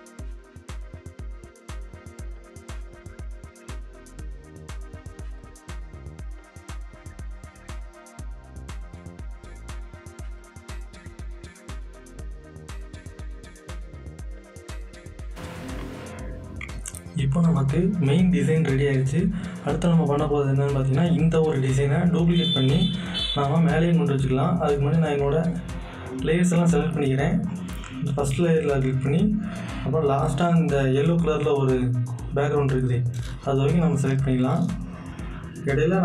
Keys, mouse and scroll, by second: 1.3 click, 2.4 click, 3.1 click, 4.8 click, 5.1 alt+scroll up 1, 5.5 click, 5.8 Return, 6.2 click, 6.7 shift+click, 7.2 ctrl+z, 7.2 click, 7.6 click, 7.8 alt+scroll down 1, 8.2 click, 8.4 click, 9.2 z, 9.4 click, 9.7 z, 9.7 right click, 9.8 click, 10.0 right click, 10.1 click, 10.3 ctrl+s, 10.9 scroll up 2, 11.1 click, 11.9-14.5 typing, 14.5 click, 15.0 click, 22.2 click, 22.2 click, 24.8 click, 24.8-27.5 drag, 29.3-31.0 scroll down 1, 32.1 click.